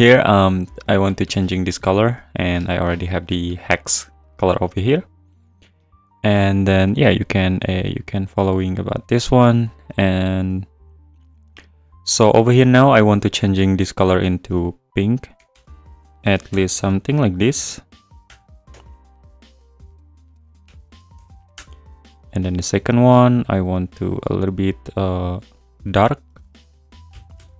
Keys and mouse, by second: 4.0 click, 10.4 click, 15.5 BackSpace, 23.4 click, 24.1 click.